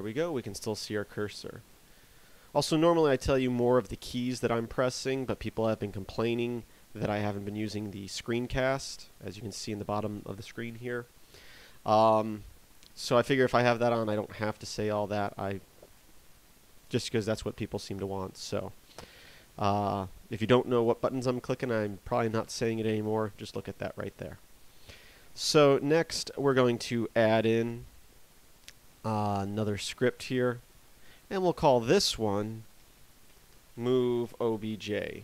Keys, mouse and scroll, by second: 8.8 scroll up 2, 9.0 scroll down 1, 9.2-12.4 scroll up 1.